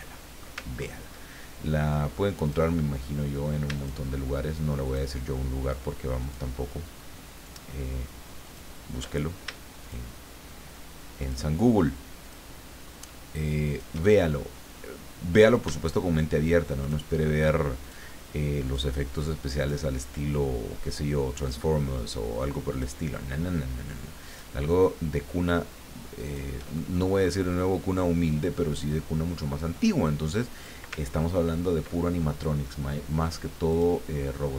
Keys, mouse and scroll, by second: 0.1 middle click, 0.8 ctrl+scroll up 1, 2.4 click, 3.7 shift+click, 4.9 shift+click, 6.2 shift+click, 7.4 shift+click, 8.4 shift+click, 9.8 shift+click, 11.2 shift+click, 12.2 shift+click, 13.7 shift+click, 14.1-15.8 shift+middle drag, 16.8 shift+click, 17.8 shift+click, 18.6 shift+click, 19.6 shift+click, 21.4 shift+click, 22.7 shift+click, 24.2 shift+click, 26.2 shift+click, 26.7 shift+middle click, 28.4-30.9 drag, 31.2-31.5 ctrl+scroll down 2, 31.9 ctrl+middle click, 33.3 click, 33.7 click.